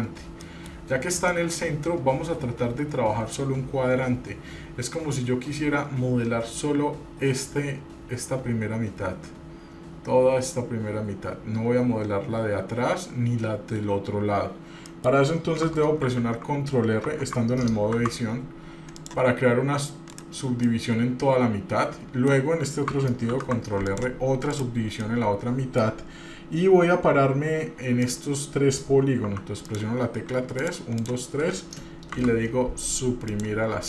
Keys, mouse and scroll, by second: 0.0-0.6 scroll down 2, 0.6 middle click, 1.5 middle click, 1.5 scroll up 1, 15.1 middle click, 16.2 ctrl+r, 17.2 Tab, 18.0 ctrl+r, 20.8-22.5 middle drag, 23.5 ctrl+r, 25.2 middle click, 28.2 click, 29.4 3, 29.8 click, 30.8 shift+click, 31.1 shift+click, 32.3 Delete.